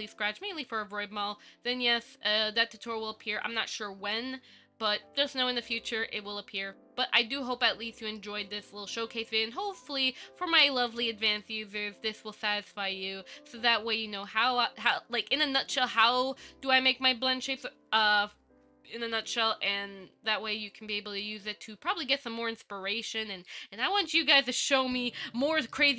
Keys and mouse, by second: 7.8 middle click, 9.2 KP_5, 10.3-11.0 middle drag, 11.6 middle click, 13.5 middle click, 14.6-15.1 ctrl+middle drag, 15.4-16.1 shift+middle drag, 16.7 shift+middle click, 17.8-23.3 middle drag, 23.7-24.9 ctrl+middle drag, 25.0 middle click.